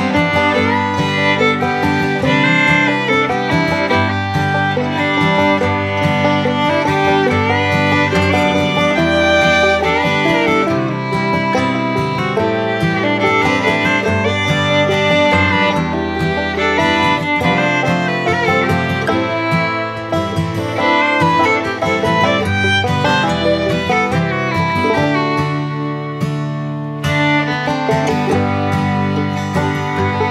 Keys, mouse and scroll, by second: 4.4-5.9 drag, 7.5 click, 8.9 Down, 10.6 click, 18.8 click, 18.9-25.1 drag, 28.5-30.2 drag.